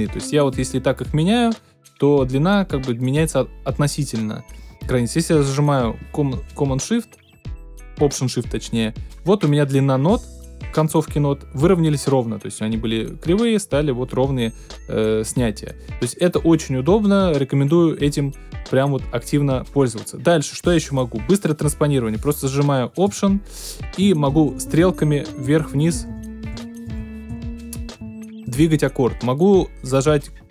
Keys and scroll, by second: 24.0 alt+Up, 25.2 alt+Down, 26.5 alt+Up, 26.8 alt+Down, 27.3 alt+Up, 28.0 alt+Down.